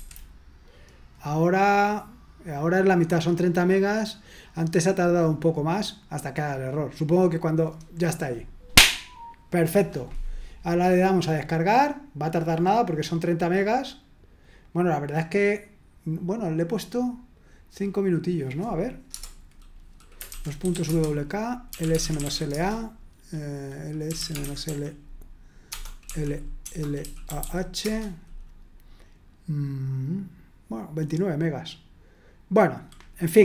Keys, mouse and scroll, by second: 11.1 click, 18.2 click, 19.1 Return, 20.0-22.7 typing, 23.8-27.9 typing.